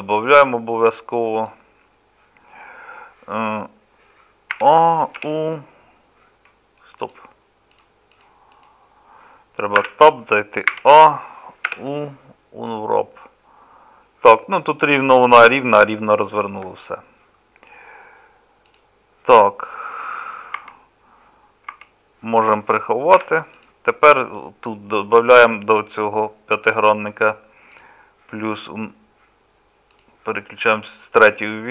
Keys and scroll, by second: 20.6 Tab, 21.8 Tab, 23.2 h.